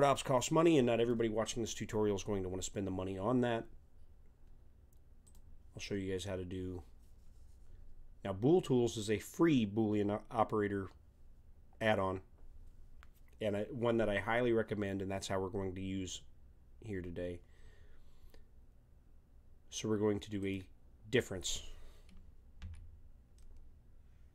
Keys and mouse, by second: 5.2-6.9 drag, 6.9-16.5 middle drag, 20.4-22.3 drag, 22.6 z, 23.3-24.3 middle drag.